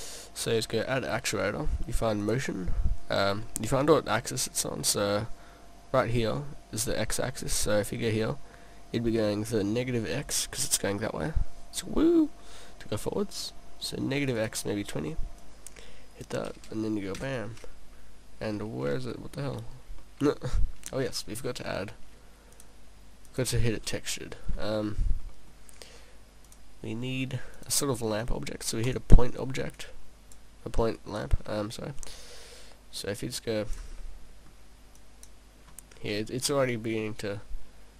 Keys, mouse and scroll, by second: 0.4 click, 3.5 middle click, 4.8 middle click, 7.3 middle click, 13.0 middle click, 14.3 click, 14.4 click, 17.0 click, 17.5 p, 20.1 middle click, 22.6 click, 24.0 middle click, 24.5-25.5 scroll down 4, 25.3 middle click, 26.5 click, 29.7 click, 31.0 click, 32.0 click, 34.0 middle click, 35.0 click, 35.9 scroll down 2, 36.6 middle click, 36.6 scroll up 1, 37.2 click.